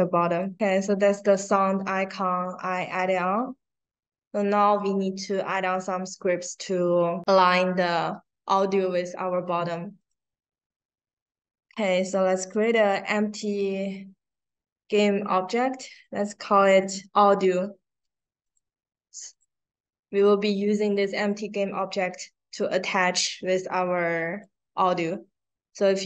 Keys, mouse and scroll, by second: 0.3 click, 3.3-4.6 drag, 9.9 right click, 12.5 click, 16.4 a, 16.8 d, 18.4 click, 19.2 click, 24.2 click.